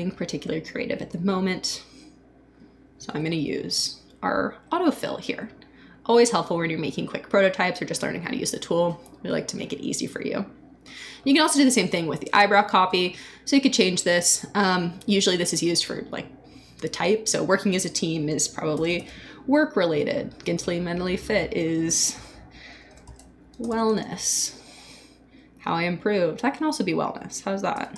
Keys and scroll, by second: 18.5-19.5 typing, 22.1 Return, 22.6-24.1 typing, 25.5 Return, 27.1 Return, 27.5-27.9 typing.